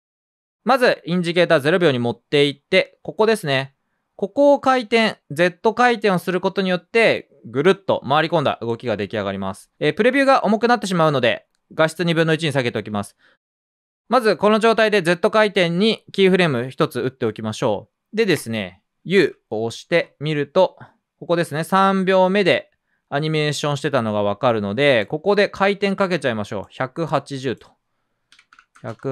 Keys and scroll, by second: 1.3 r, 10.1 super+z, 19.1 u, 28.2-29.1 typing.